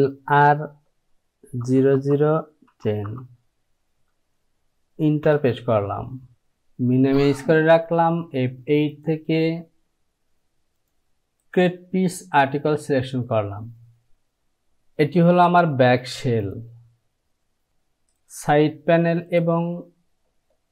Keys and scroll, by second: 0.0-0.3 typing, 1.6 KP_0, 2.0 KP_0, 2.7 KP_1, 5.3 Return.